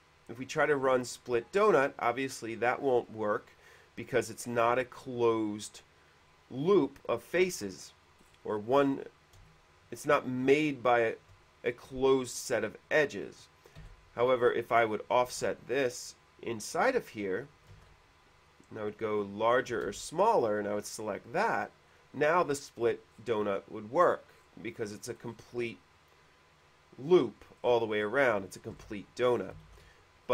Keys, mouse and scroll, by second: 1.2 click, 3.1 click, 8.4 scroll up 1, 9.7-12.5 shift+middle drag, 13.5-13.9 scroll up 1, 14.6 click, 15.5 ctrl+z, 15.5 f, 16.3 click, 18.0 ctrl+z, 18.7 click, 19.8 click, 20.1 space, 20.4 click, 22.1 ctrl+z, 22.1 click, 22.8 middle click, 23.0-23.7 scroll down 1, 24.3-24.8 scroll up 2, 24.8 middle click, 25.4 middle click, 25.8 middle click, 27.9 middle click, 29.1 ctrl+z, 29.9 ctrl+z.